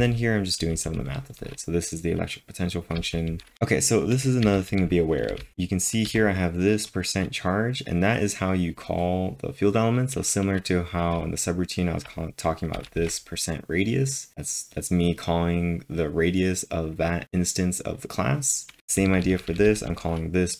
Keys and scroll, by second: 4.4 typing, 5.8 typing, 10.9-13.0 typing, 18.8 typing.